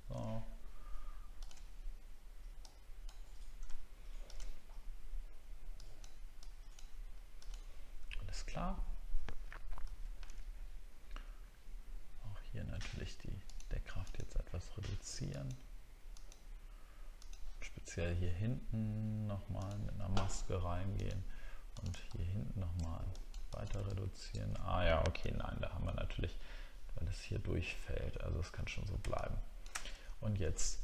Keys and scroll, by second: 9.8 ctrl+d, 25.2 ctrl+z, 30.0 alt+scroll up 1.